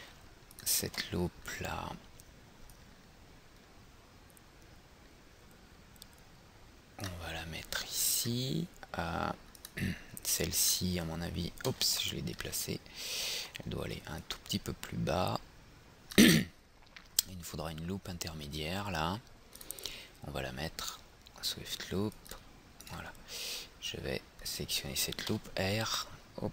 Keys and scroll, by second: 11.9 ctrl+z, 12.5 ctrl+z.